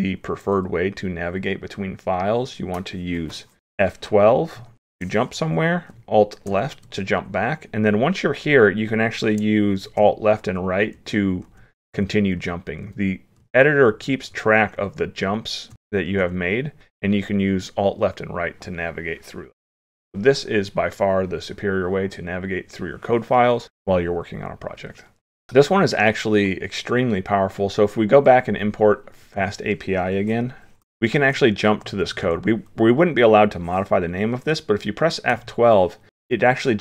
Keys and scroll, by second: 6.5 alt+Left, 10.0 alt+Left, 10.5 alt+Right, 11.0 alt+Right, 11.5 alt+Left, 12.0 alt+Left, 12.4 alt+Right, 12.9 alt+Right, 13.4 alt+Left, 13.9 alt+Left, 15.7 alt+Right, 16.0 alt+Left, 16.5 alt+Left, 16.8 alt+Right, 17.3 alt+Right, 17.7 alt+Left.